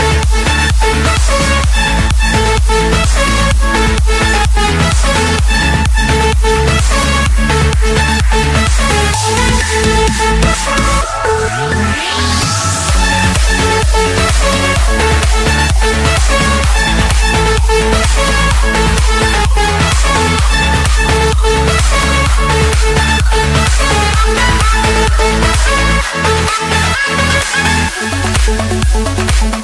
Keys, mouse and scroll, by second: 1.2 Escape, 2.7-3.7 drag, 4.5 click, 5.4 click, 5.7-6.4 scroll, 6.4 click, 7.1 click, 8.0 scroll, 8.2 Escape, 8.9 click, 9.4 click, 10.0-11.6 typing, 11.9 Return, 15.1-15.5 typing, 15.9 Return, 16.9 Escape, 18.3-19.8 typing, 19.9 Return, 20.8 click, 21.6 click, 22.0 Return, 23.1-24.5 typing, 24.9 Return, 26.6 click, 27.8-29.4 typing, 28.2 Return.